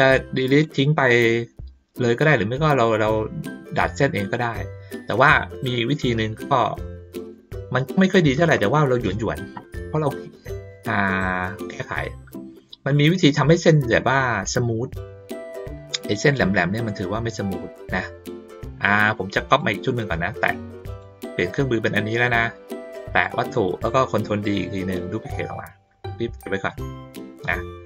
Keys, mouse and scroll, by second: 0.0 click, 5.1 ctrl+middle click, 6.2 ctrl+middle click, 6.8 middle click, 7.8 ctrl+middle click, 12.5 click, 14.4 click, 18.8 middle click, 19.5 click, 20.9 click, 23.1 click, 25.4-26.8 drag, 27.5 click.